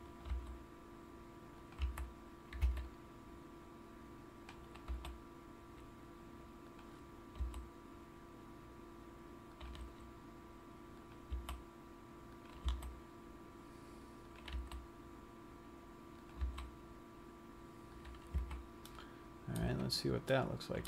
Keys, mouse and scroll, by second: 0.5 right click, 0.7 g, 2.2 click, 2.2 a, 2.9 c, 5.3 e, 7.2 click, 7.7 s, 9.9 click, 10.1 g, 11.6 click, 11.7 s, 13.1 e, 14.8 click, 14.9 r, 16.7 click, 16.9 s, 18.5 click, 18.7 a, 19.1 middle click, 19.8 Tab, 20.6 middle click.